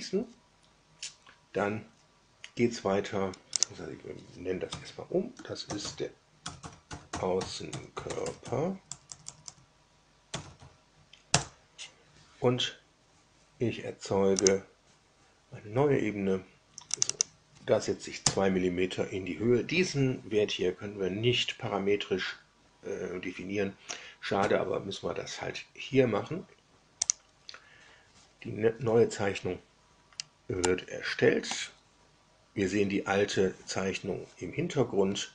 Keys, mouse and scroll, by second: 3.5 click, 4.6 F2, 5.3-11.0 typing, 11.2 Return, 14.3 click, 16.9 click, 18.2 KP_2, 27.0 click, 30.1 scroll down 1, 30.6-31.6 shift+middle drag.